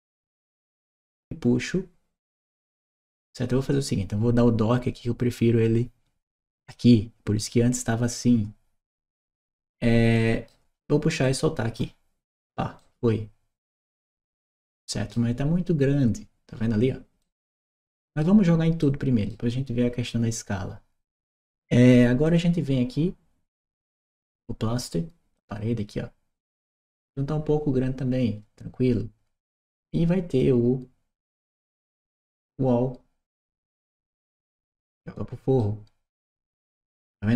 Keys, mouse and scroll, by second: 6.4 click, 8.7 right click, 10.0 right click, 11.0 click, 12.5-14.9 middle drag, 12.5-14.9 scroll, 17.0-18.0 middle drag, 17.0-18.0 scroll, 18.6 middle click, 18.6-19.0 scroll, 22.0 click, 24.5 click, 30.0 click, 32.1 click, 33.3 right click, 34.4 click, 35.4-37.3 right drag.